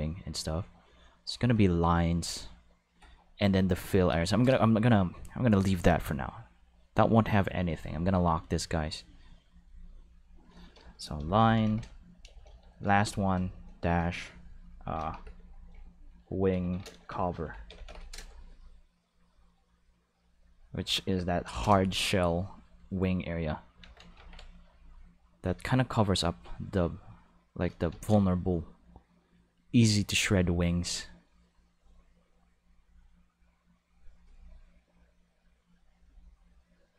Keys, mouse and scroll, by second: 7.5 click, 7.8 click, 8.2 click, 9.6 click, 10.2 click, 10.3 click, 11.2-13.3 typing, 15.0 shift+w, 15.2 shift+i, 16.5-17.9 typing, 19.5 click, 19.7 click, 19.9-21.1 drag, 21.4 Left, 21.6 Return, 23.8 ctrl+s, 24.7 click, 26.4-27.6 drag, 27.9 ctrl+z, 28.5-30.3 drag, 32.5-34.1 drag, 35.4-36.9 drag.